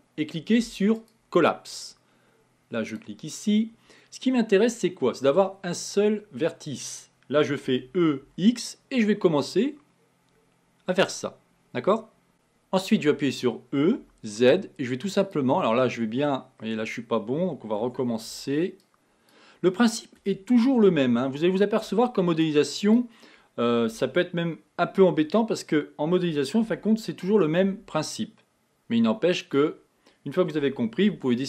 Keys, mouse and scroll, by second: 2.9-6.0 drag, 7.7 e, 13.9 e, 15.6-16.6 scroll up 8, 17.9 Tab, 18.3 b, 20.2 Tab, 20.9 a, 21.9 b, 23.9 b, 26.7 g, 30.6 a, 31.1 b.